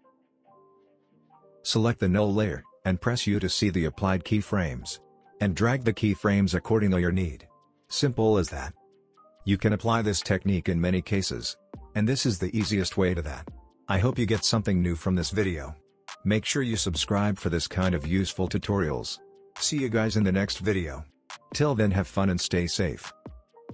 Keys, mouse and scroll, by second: 1.2-1.8 scroll down 1, 1.8 click, 2.6 u, 3.4-4.9 drag, 5.9 space, 9.6 click, 10.9 space, 13.6 space, 14.7 click, 16.4 space, 21.0 space, 22.0-23.5 click.